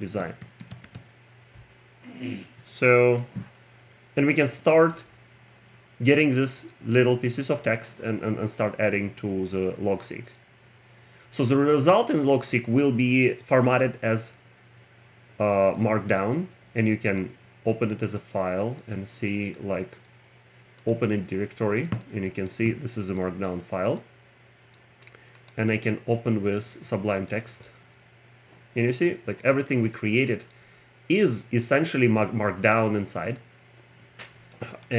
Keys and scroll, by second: 0.8 n, 4.5 Return.